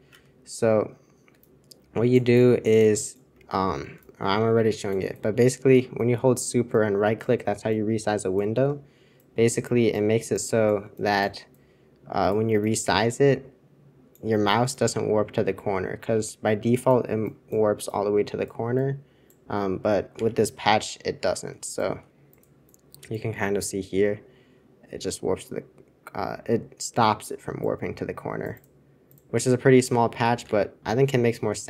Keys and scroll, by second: 20.2 super+2.